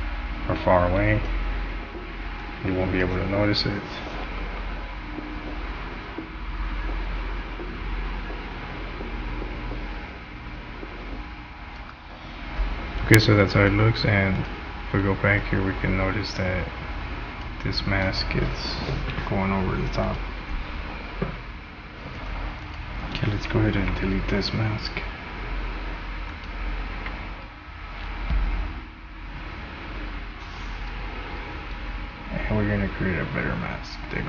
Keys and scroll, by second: 11.8 space, 23.9 Delete, 27.0 Delete.